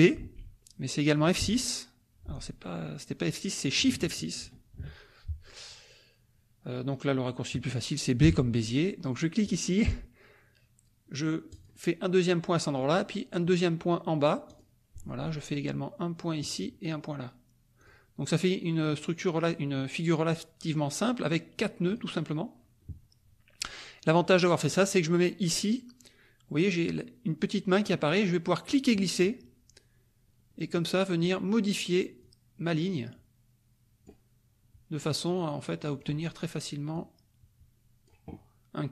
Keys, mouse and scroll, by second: 0.2 b, 1.4 F6, 4.4 shift+F6, 8.2 b, 9.4 click, 11.5 click, 14.4 click, 16.4 click, 17.9 click, 21.9 click, 28.6-31.4 drag, 32.2-34.2 drag, 35.3 click, 36.9-38.2 drag.